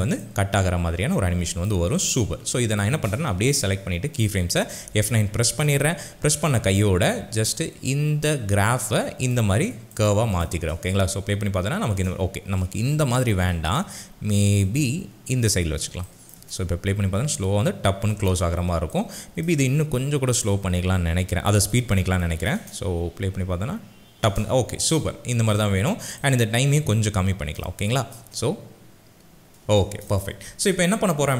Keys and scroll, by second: 4.9 F9, 10.6 space, 12.9 ctrl+z, 16.4 space, 22.6 space, 28.2 space.